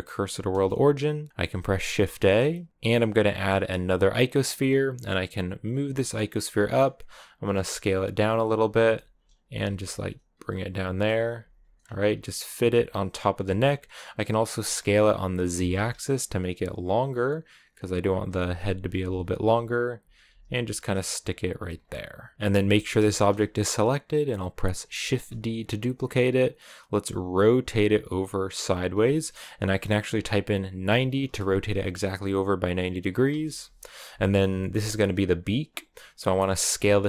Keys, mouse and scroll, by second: 0.3 shift+s, 2.7 x, 3.9 shift+a, 5.5 g, 6.9-7.4 scroll up 2, 7.4 s, 8.6 g, 9.2 s, 9.6 g, 10.3-10.6 scroll up 1, 10.6 s, 11.2 g, 11.6 scroll down 1, 11.9 s, 12.4 g, 14.6 s, 17.7-20.1 typing, 21.4 a, 21.5-22.3 scroll down 3, 22.3-24.8 shift+middle drag, 24.8 shift+d, 26.8 r, 34.4 shift+middle click, 34.5-36.6 scroll up 2, 36.6 s.